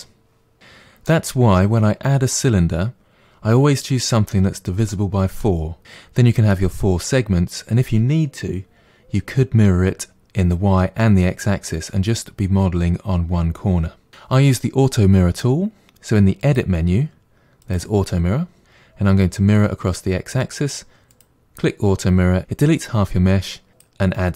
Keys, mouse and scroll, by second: 0.6-3.0 middle drag, 4.9 middle click, 15.8 click, 16.4 click, 17.6 click, 21.1 click, 23.7 click.